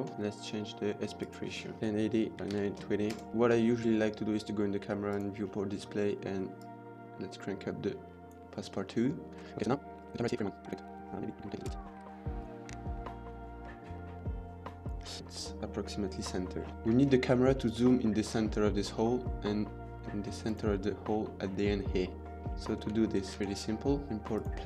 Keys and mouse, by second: 1.2 click, 2.3 click, 4.9 drag, 6.5 click, 9.4 ctrl+s, 11.4 middle click, 11.6 KP_0, 12.0 g, 12.0 x, 12.7 r, 16.7 shift+middle click, 17.4 middle drag, 20.3 click, 22.6 shift+middle drag, 23.3-23.7 shift+middle drag.